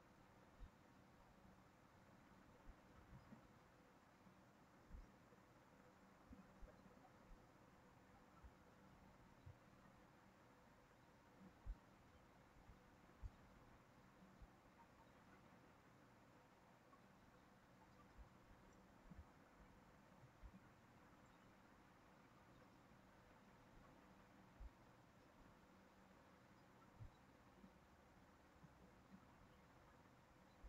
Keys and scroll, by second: 28.1 ctrl+c, 28.4 ctrl+v.